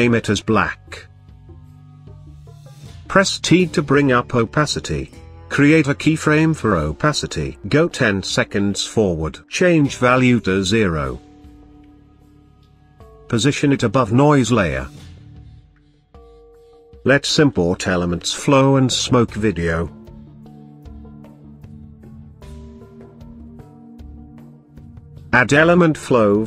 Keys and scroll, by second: 2.3 t.